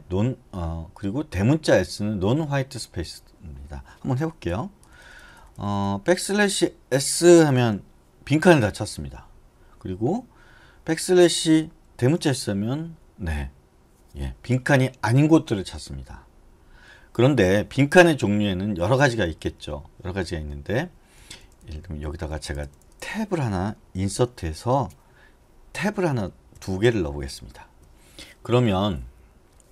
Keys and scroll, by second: 4.7-5.9 typing, 7.8 typing, 11.3 BackSpace, 12.0 shift+s, 19.8 Escape, 20.7-22.9 typing, 24.3 i, 26.0 Tab, 26.7 Tab, 27.7 Escape.